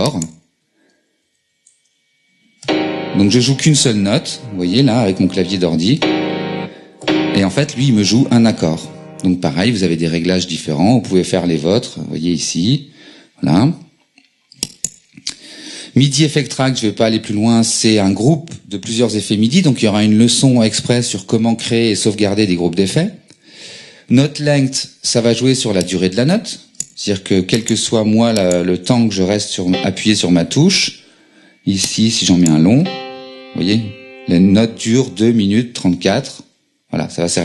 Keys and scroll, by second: 1.2 Down, 1.8 Return, 2.6 q, 4.6 q, 6.0 q, 28.8 BackSpace, 29.7 q, 32.8 q.